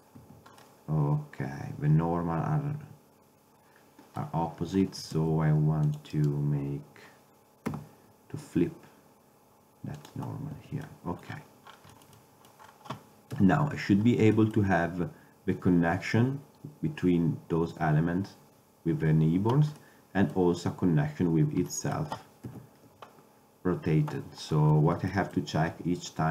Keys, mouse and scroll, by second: 0.3 a, 5.2 ctrl+Tab, 7.8 w, 10.7 Tab, 13.5 KP_7, 19.9-22.0 middle drag, 22.6 KP_7, 23.6-24.5 middle drag.